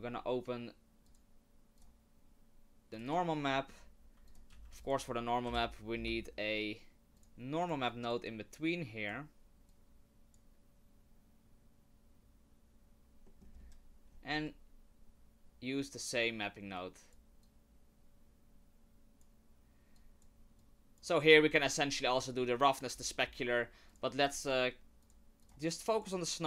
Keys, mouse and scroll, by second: 3.1 click, 3.6 middle click, 4.3 shift+click, 4.5 shift+a, 7.9 click, 8.5 click, 9.7 click, 13.2 middle click, 13.6-13.9 scroll down 1, 15.1-15.5 scroll down 9, 15.8 click, 16.8 click, 17.4 click, 20.0 click, 20.6 click, 21.5-23.0 scroll up 3, 23.0-23.3 scroll up 1, 23.3-23.7 scroll down 4, 23.9 click, 24.4 shift+click, 25.0 click, 25.4 shift+click, 26.0 click.